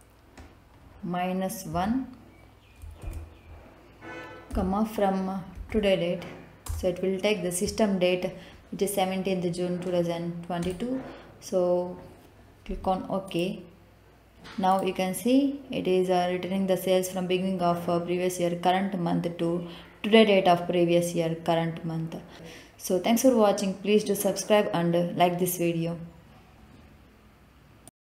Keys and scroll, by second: 1.6 -, 3.0 ctrl+v, 4.5 ,, 5.5 t, 5.7 o, 6.6 Return.